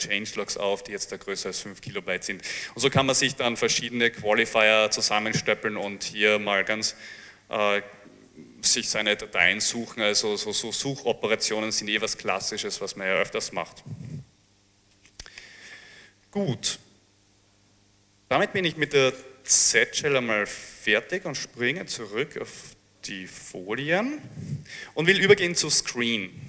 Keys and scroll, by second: 20.6 alt+Tab, 23.6 Page_Down.